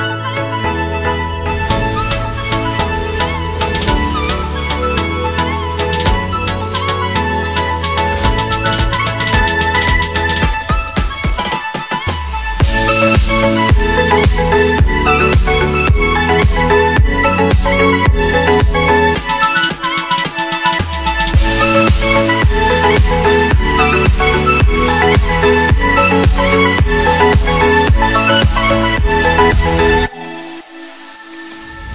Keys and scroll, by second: 1.6 r, 1.9 l, 5.7-6.8 typing, 8.3 Return, 21.1 c, 27.0 c, 30.6 F4.